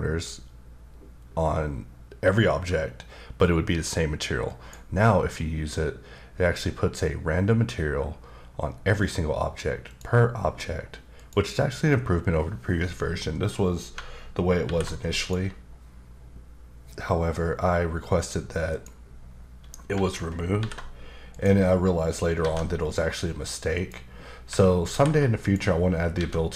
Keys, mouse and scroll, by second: 4.5 click, 9.9 click, 11.2 click, 14.6 alt+m, 15.1 click, 18.7 click, 20.6 alt+m, 21.3 click, 22.4 alt+a, 23.8 click, 24.8 alt+m, 25.4 click, 26.2 alt+a.